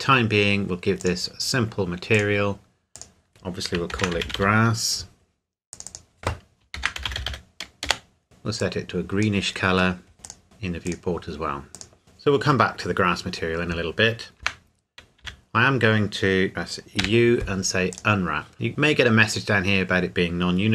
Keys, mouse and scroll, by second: 1.0 click, 3.9-4.4 typing, 5.7 click, 6.7-7.3 typing, 7.8 Return, 8.2 click, 9.8-10.1 scroll down 1, 10.1 scroll up 1, 10.2 click, 10.4-10.8 scroll down 1, 10.8 click, 12.0-12.8 scroll down 1, 14.4 Tab, 15.2 a, 17.0 u, 17.9 click.